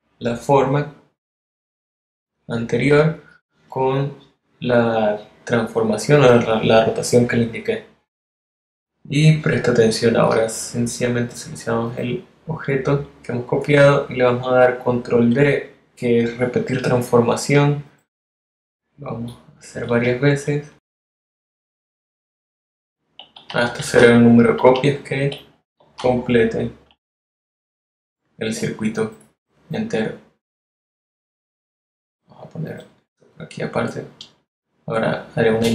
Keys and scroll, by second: 20.1 super+d, 21.4 super+d, 23.2 super+d, 26.4 super+d, 35.0 shift+space.